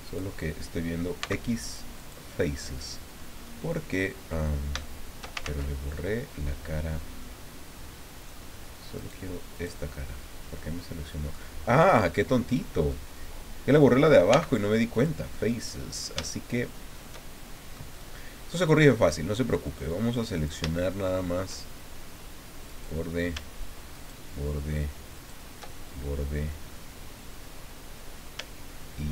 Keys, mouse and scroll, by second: 0.0 right click, 1.2 x, 2.0 click, 2.6 middle click, 3.4-4.4 middle drag, 4.8 shift+middle click, 5.4 ctrl+shift+z, 5.9-7.1 ctrl+shift+drag, 7.2-8.4 drag, 8.9 right click, 9.5 right click, 9.9-11.4 drag, 12.9-14.0 drag, 14.3 x, 14.9-16.2 drag, 17.7 click, 20.4 shift+click, 20.7 shift+middle click, 22.7 right click, 23.9 shift+right click, 25.2 shift+right click, 25.7-28.4 shift+middle drag.